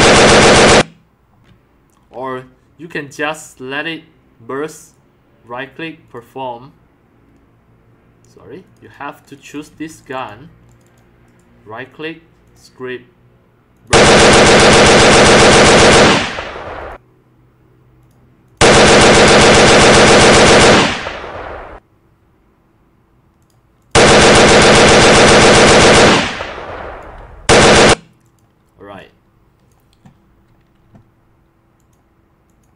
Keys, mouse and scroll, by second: 0.6 click, 1.4 z, 6.0 click, 6.7 click, 9.4 click, 9.7 q, 10.0 click, 10.7 click, 10.8 click, 11.2 click, 13.7 click, 16.8 click, 18.0 click, 18.4 click, 19.1 scroll up 4, 23.4 click, 23.8 click, 25.6 right click, 26.3 x, 26.4 drag, 26.8 c, 28.2 click, 28.9 c, 31.7 click, 32.5 click.